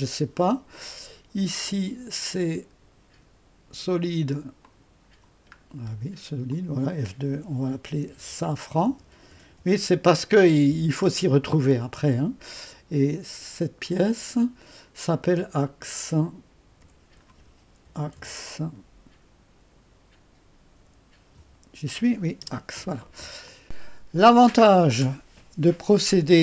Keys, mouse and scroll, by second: 1.2-2.0 typing, 1.5 click, 4.6 click, 5.0-10.7 typing, 5.5 scroll up 1, 6.5 click, 7.3 F2, 11.0 Return, 13.8 click, 13.8-14.6 typing, 15.8 click, 16.0-18.3 typing, 16.8 F2, 20.8 typing, 22.4 Return, 23.2-23.9 typing, 23.4 click.